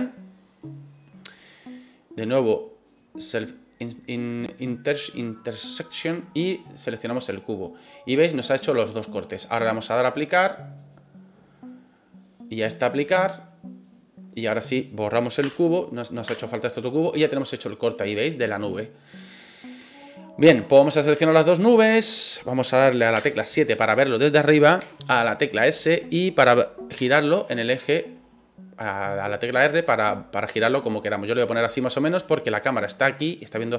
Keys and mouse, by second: 2.3 drag, 2.9 click, 5.2 click, 10.2-10.9 drag, 12.2 right click, 13.3 click, 14.4 right click, 15.4 Delete, 15.8 right click, 16.2 Delete, 16.6-17.8 middle drag, 18.7-19.1 middle drag, 20.8 right click, 21.5 shift+right click, 23.1 KP_7, 24.8 s, 25.6 click, 26.9 r, 31.9 click.